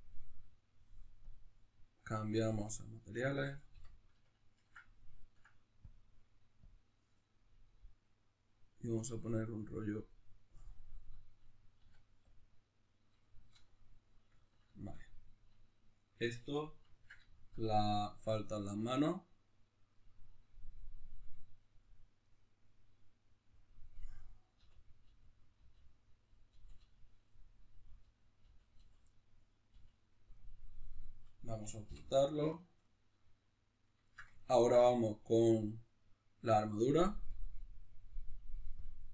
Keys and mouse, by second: 3.7 n, 11.2-24.2 shift+middle drag, 12.1 z, 24.2 right click, 24.6 l, 29.1-37.8 middle drag, 29.7 l, 31.8 h, 37.8-39.1 drag.